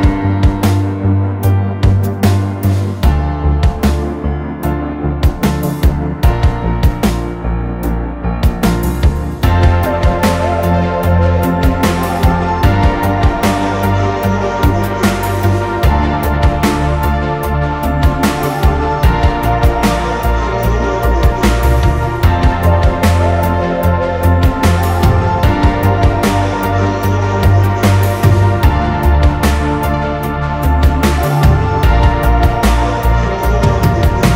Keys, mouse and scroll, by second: 0.2 scroll up 6, 0.5 middle click, 1.0 scroll down 2, 1.1-1.5 scroll up 2, 1.5-1.8 scroll down 2, 2.4 scroll down 3, 3.0 scroll down 3, 3.1-5.1 typing, 3.4 double click, 3.5 double click, 4.9 scroll down 2, 5.0-5.6 scroll up 8, 5.1 middle click, 5.6 middle click, 5.8-6.5 scroll down 17, 7.0 Return, 7.4-8.0 scroll up 4, 7.6 middle click, 8.2 scroll down 7, 8.3 space, 9.4 shift+click, 9.8 shift+click, 10.2 shift+click, 10.7 middle click, 11.1 scroll up 9, 11.3-12.8 typing, 13.4 shift+click, 13.6 shift+click, 13.9-14.2 typing, 14.0 double click, 14.6 shift+click, 14.9 shift+click, 15.2 typing, 15.3 double click, 16.2-19.3 typing, 17.0 scroll up 5, 19.4 scroll down 8, 19.7 middle click, 19.9-20.7 scroll up 12, 20.8 e, 21.2-21.6 scroll down 13, 21.9-22.5 scroll down 18, 22.5-22.9 scroll up 9, 23.3-23.9 scroll down 18, 23.9-24.6 scroll up 9, 26.7-27.1 scroll down 4, 27.3 scroll up 9, 27.6 space, 28.2 scroll down 3, 28.2 double click, 28.5 double click, 29.0 right click, 29.5 scroll down 6, 29.7 middle click, 30.2-30.7 scroll up 6, 30.7-33.0 typing, 30.8 double click, 32.9-33.3 scroll down 21, 33.3 middle click, 33.9 middle click, 34.2 scroll up 1.